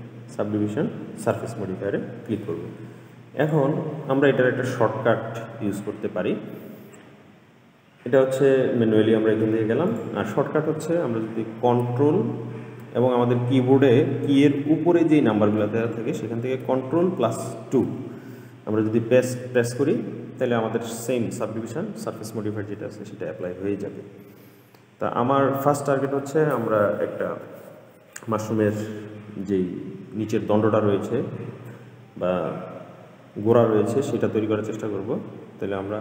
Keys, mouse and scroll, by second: 3.6-5.2 drag, 5.2-6.7 scroll up 9, 6.7-7.8 scroll up 1, 7.8-8.9 scroll up 1, 10.0-13.2 drag, 17.6 ctrl+2, 34.9-36.0 scroll down 3.